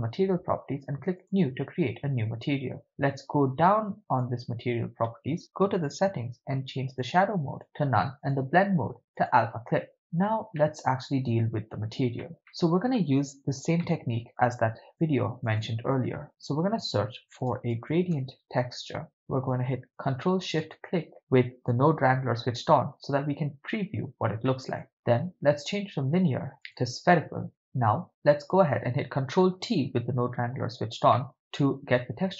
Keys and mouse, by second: 1.2 click, 3.2-4.3 drag, 6.9-7.6 drag, 8.2-9.4 drag, 9.9-10.3 middle drag, 10.6-11.9 ctrl+middle drag, 12.2 shift+middle click, 12.5-13.0 middle drag, 13.8-14.4 middle drag, 14.8 shift+a, 20.9 ctrl+shift+click, 24.5-24.8 middle drag, 24.9-27.0 drag, 28.5 click, 29.7 ctrl+t, 31.1 middle click.